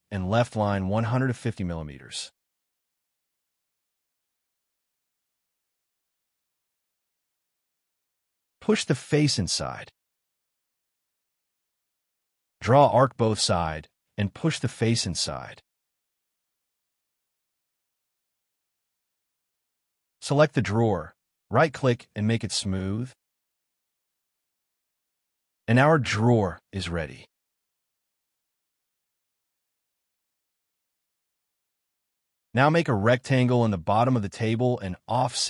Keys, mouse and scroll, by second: 0.2-1.4 typing, 2.6 m, 4.5-7.3 typing, 7.2 middle click, 7.7-8.3 scroll up 2, 9.9 scroll down 1, 10.2 middle click, 10.7 scroll down 1, 11.1 shift+middle click, 11.5-11.8 scroll up 2, 11.6 space, 12.1 a, 13.3 double click, 16.2 scroll up 1, 16.5 double click, 17.7 scroll down 1, 18.1 double click, 19.8 b, 20.7 space, 21.0 right click, 24.0-24.4 scroll down 2, 24.2 Escape, 24.4 Escape, 24.5 middle click, 28.5 shift+middle click, 29.1 scroll down 1, 29.5 shift+middle click, 31.7 scroll up 1, 32.3 middle click, 32.6 r, 34.2 scroll up 1, 34.3 f.